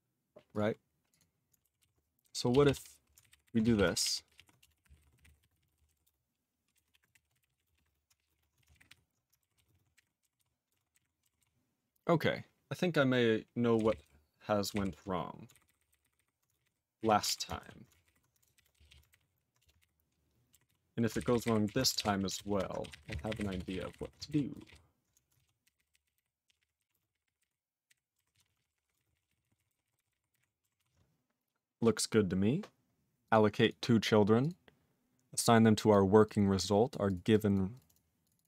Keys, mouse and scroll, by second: 0.5 click, 0.6 click, 1.1 click, 1.2 click, 1.8 ctrl+s, 2.5-8.3 typing, 3.3 ctrl+n, 3.3 ctrl+b, 3.5 ctrl+b, 4.0 ctrl+n, 4.0 ctrl+e, 4.3 ctrl+p, 4.4 ctrl+e, 8.4 ctrl+e, 8.6 alt+w, 8.7 ctrl+n, 8.9 ctrl+y, 9.7 ctrl+s, 9.7 ctrl+a, 10.0 ctrl+g, 10.0 ctrl+e, 10.4 ctrl+s, 10.7 ctrl+space, 10.7 ctrl+a, 10.9 ctrl+g, 11.0 ctrl+e, 11.4 ctrl+s, 13.8 ctrl+n, 13.9 ctrl+n, 14.0 ctrl+n, 14.8 ctrl+n, 15.5 alt+b, 15.7 alt+b, 15.8 alt+b, 15.9 alt+b, 16.1 alt+b, 16.2 alt+b, 16.5 ctrl+space, 16.6 ctrl+e, 16.6 ctrl+n, 17.0 ctrl+e, 17.3 alt+w, 17.6 ctrl+a, 17.9 alt+f, 18.1 alt+b, 18.6 ctrl+<, 18.8 /, 18.9 /, 19.1 ctrl+g, 19.2 ctrl+e, 19.6 Return, 19.9 ctrl+y, 20.8 ctrl+s, 21.2 alt+b, 21.3 alt+b, 21.5 alt+b, 21.7 alt+f, 22.0 ctrl+<, 22.4 ctrl+BackSpace, 22.5 ctrl+BackSpace, 22.6-24.5 typing, 24.5 ctrl+n, 24.7 ctrl+n, 25.4 ctrl+a, 25.7 ctrl+k, 25.8 ctrl+k, 25.9 ctrl+k, 26.1 ctrl+k, 26.2 ctrl+k, 26.5 ctrl+p, 26.6 ctrl+p, 26.8 ctrl+e, 26.9 ctrl+space, 27.0 ctrl+p, 27.1 ctrl+p, 27.2 ctrl+p, 27.4 ctrl+e, 27.9 ctrl+g, 28.4 ctrl+s, 28.5 ctrl+a, 28.6 ctrl+p, 28.7 ctrl+p, 28.8 ctrl+p, 29.0 ctrl+space, 29.0 ctrl+n, 29.3 ctrl+e, 29.3 ctrl+n, 29.4 ctrl+e, 29.6 ctrl+e, 29.7 ctrl+n, 29.7 ctrl+e, 29.9 ctrl+e, 30.0 ctrl+n, 30.2 ctrl+e, 30.3 ctrl+g, 30.8 ctrl+s, 33.3 click, 33.3 click, 33.6 click, 33.7 click, 34.4 click, 34.5 click, 35.4 click, 35.9 click, 36.3 click, 36.9 click, 37.1 click, 37.1 click, 37.3 click, 37.5 click, 37.7 click, 37.8 click, 37.9 double click, 37.9 double click, 38.2 click, 38.3 click, 38.4 double click, 38.4 double click.